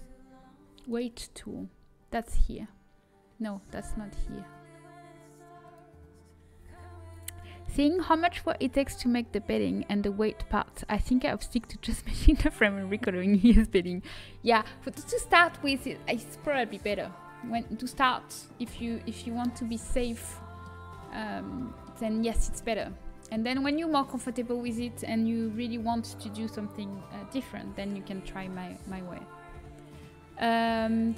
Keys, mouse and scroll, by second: 2.4 click, 5.6-8.2 drag, 19.4-20.9 middle drag, 20.9 Tab.